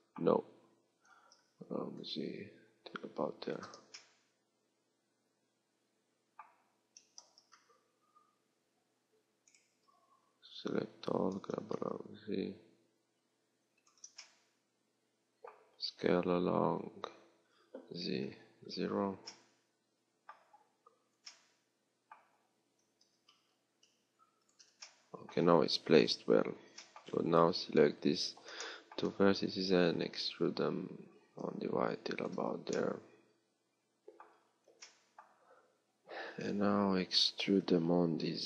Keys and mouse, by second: 1.4 g, 4.7-6.0 drag, 10.2 a, 10.4 a, 11.4 g, 16.5 s, 26.0 KP_3, 27.0 a, 27.8 b, 29.8 e, 37.5 e.